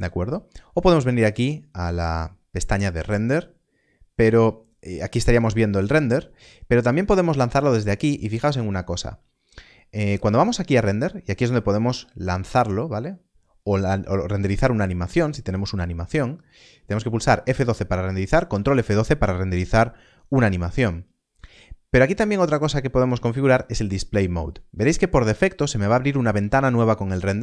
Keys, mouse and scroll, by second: 1.2 middle click, 1.3 click, 6.8 click.